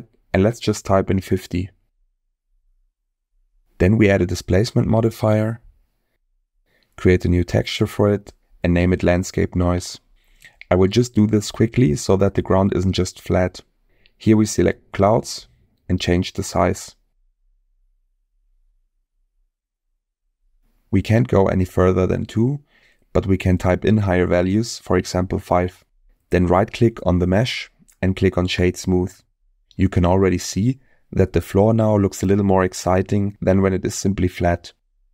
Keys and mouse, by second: 0.6-1.8 drag, 3.7 Tab, 4.6-6.2 drag, 7.9-12.3 drag, 13.4 click, 14.4-15.6 drag, 17.5-23.0 drag, 23.4-25.0 drag, 26.5-27.1 middle drag, 27.3 right click, 29.1-29.6 middle drag, 30.6-31.0 shift+middle drag, 32.1 click, 33.5-35.1 drag.